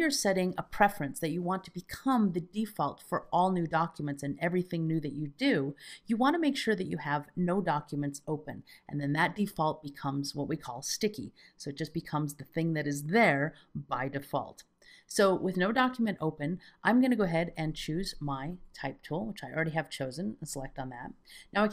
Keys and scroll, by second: 18.7 alt+z, 20.6 alt+z.